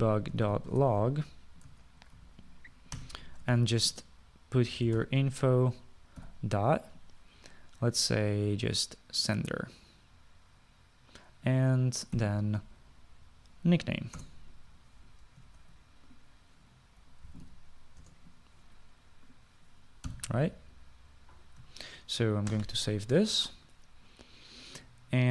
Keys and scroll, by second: 0.0 Return, 0.2-7.3 typing, 13.0-13.8 typing, 15.3 Return, 16.6 ctrl+z, 18.1-19.0 typing, 19.1 Return, 21.2 ;, 23.6 ctrl+s.